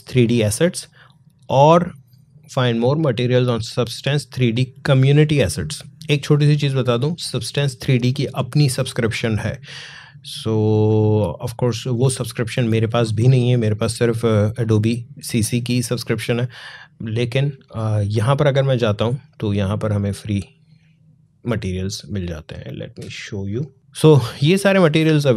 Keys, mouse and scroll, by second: 18.9 click, 21.3-23.7 drag, 24.2 scroll down 1.